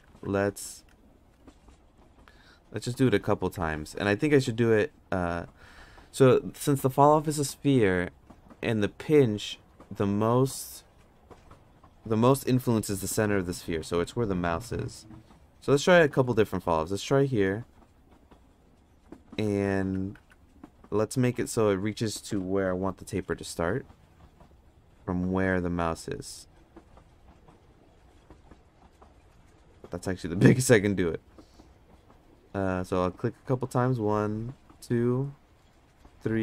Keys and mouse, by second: 0.1 ctrl+z, 0.5 ctrl+z, 1.6 f, 2.8 click, 3.6 ctrl+z, 16.3 n, 17.6 click, 18.2 click, 19.3 ctrl+z, 19.8 ctrl+z, 20.2 ctrl+z, 21.2 g, 23.3 f, 24.6 f, 27.8 f, 28.9 f, 33.2 click, 34.3 click, 36.0 click.